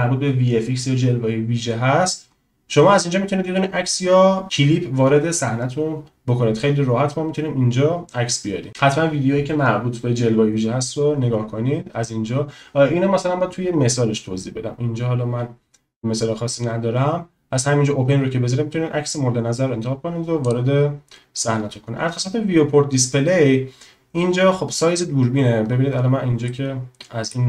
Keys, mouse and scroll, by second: 20.4 click, 26.5-27.3 middle drag.